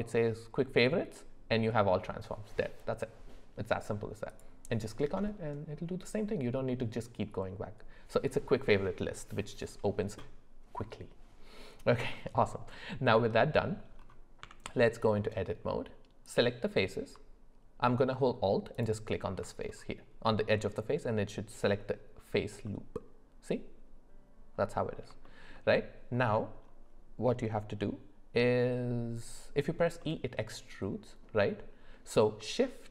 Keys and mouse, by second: 12.1 middle click, 13.2 middle click, 14.4 Tab, 16.2 click, 18.7 alt+click, 20.3 middle click, 22.6-24.9 middle drag, 25.2 shift+middle click, 26.2 middle click, 30.0 middle click.